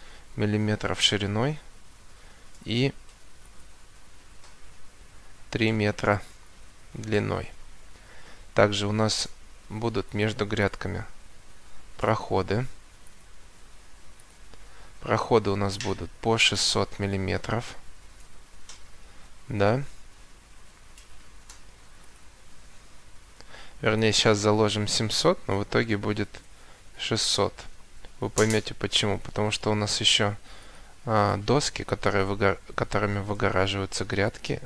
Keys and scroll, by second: 5.2 3, 6.4 Return, 7.6 Escape, 13.2 Escape, 17.3 6, 17.7 0, 18.1 Return, 19.0 Escape, 23.4 Escape, 25.8 7, 26.4 0, 26.9 Return, 29.4 Escape.